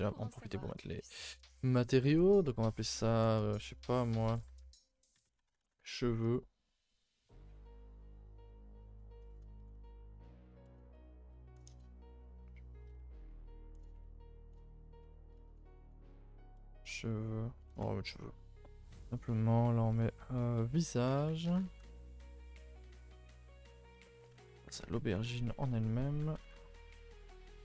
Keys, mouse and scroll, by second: 0.9-17.8 drag, 17.8 BackSpace, 19.2 click, 20.0-22.9 drag, 22.9 scroll down 1, 23.2-23.5 shift+middle drag, 23.5 scroll down 1, 23.8-24.3 shift+middle drag, 24.3 a, 24.5 a, 24.7 click, 25.3 Tab, 25.6 Tab, 26.3 ctrl+i, 26.5 h, 26.7 Tab, 27.2 a, 27.3 a.